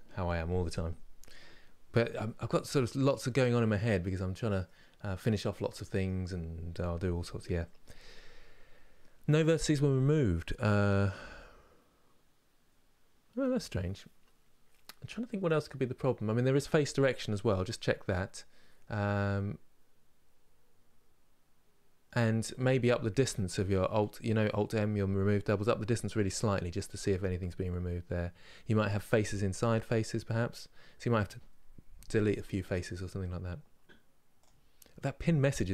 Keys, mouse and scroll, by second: 3.4-35.7 middle drag.